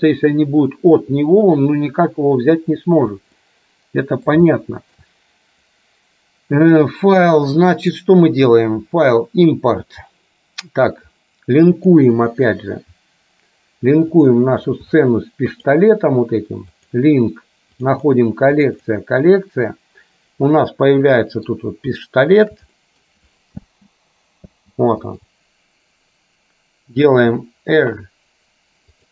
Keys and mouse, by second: 3.5-4.5 middle drag, 4.6 shift+middle click, 7.8-12.2 drag, 20.6-21.6 middle drag, 22.2 shift+middle click, 22.8 middle click, 23.7 space, 25.1 click, 25.1 space, 27.2 r.